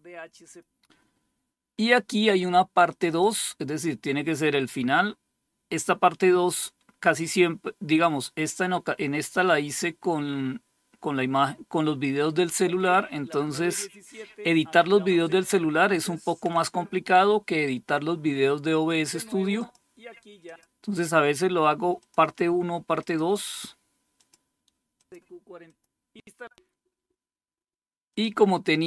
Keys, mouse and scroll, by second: 2.3 click, 19.1 click, 19.9 click, 21.6 click, 22.4 click, 23.7 click, 24.4 click, 25.1 click, 25.8 click, 26.2 click, 27.6 click.